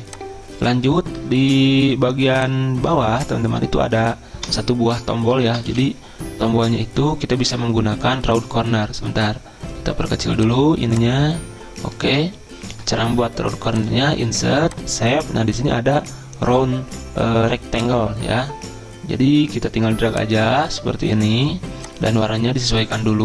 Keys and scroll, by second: 1.4 shift+Right, 1.5 shift+Right, 4.5 BackSpace, 5.5 BackSpace.